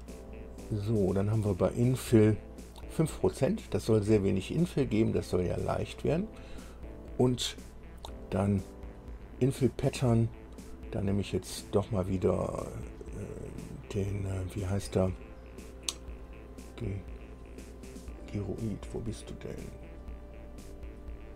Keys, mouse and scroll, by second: 11.2 click.